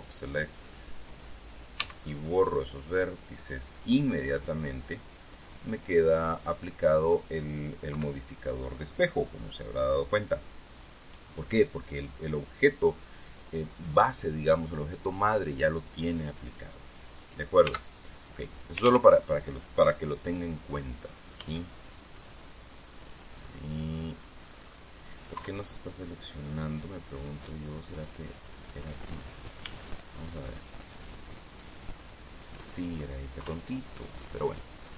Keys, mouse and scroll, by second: 2.4 x, 3.5 click, 3.7-7.9 middle drag, 7.1 scroll up 1, 8.5 KP_3, 18.2 a, 19.4 ctrl+z, 22.0 b, 22.4-23.8 drag, 24.0-25.4 middle drag, 25.9 KP_3, 28.8 click, 30.2 b, 30.7-32.3 drag, 32.3 middle click, 33.1 right click, 33.9 KP_3.